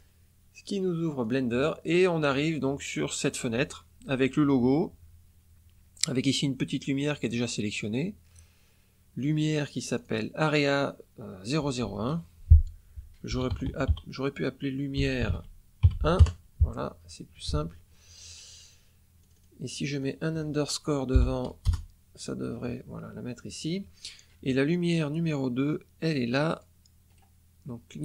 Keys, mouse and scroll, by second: 1.2 click, 9.8 click, 13.2 l, 13.5 u, 13.7 m, 13.8 i, 14.9 e, 15.1 r, 15.2 e, 15.7 KP_1, 16.1 KP_Enter, 17.6-18.0 scroll down 1, 18.2 scroll down 2, 19.2 click, 19.9 click, 21.6 Return, 26.4 click, 27.0 right click.